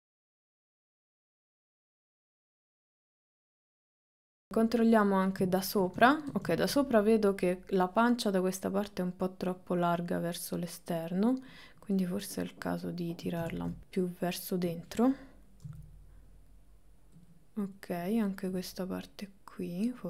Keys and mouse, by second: 0.0 click, 0.4 click, 0.7 click, 0.8 click, 1.2 click, 1.6 ctrl+middle click, 1.8 KP_1, 1.9 KP_3, 2.2 ctrl+shift+middle click, 2.6 g, 3.2 g, 4.4 KP_7, 8.2 click, 9.7-11.1 drag, 11.6 click, 12.5 click, 13.6 ctrl+z, 15.7 g, 17.8 click, 18.6-20.0 drag.